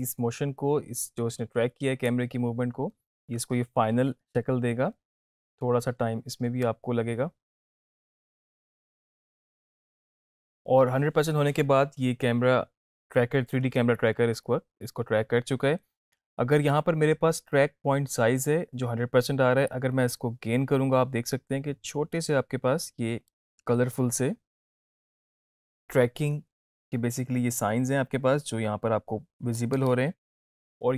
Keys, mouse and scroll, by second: 19.7-29.7 drag.